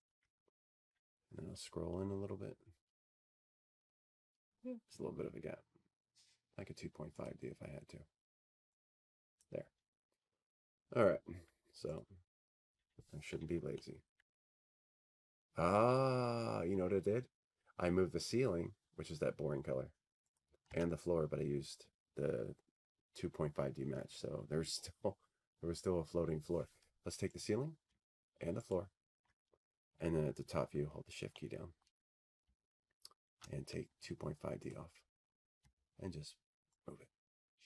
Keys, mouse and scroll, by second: 0.4 alt+w, 0.4 click, 1.0 t, 1.9 click, 2.0 t, 4.6 click, 5.8 ctrl+click, 6.9-8.0 scroll, 8.2-9.2 scroll, 9.9-10.9 scroll, 12.9-17.1 drag, 17.6-19.7 drag, 26.0 click, 26.3 Delete, 28.5-29.7 scroll, 33.1 click, 34.4 ctrl+click, 35.8-37.0 scroll, 37.0 scroll, 37.0 middle click, 37.5 middle click.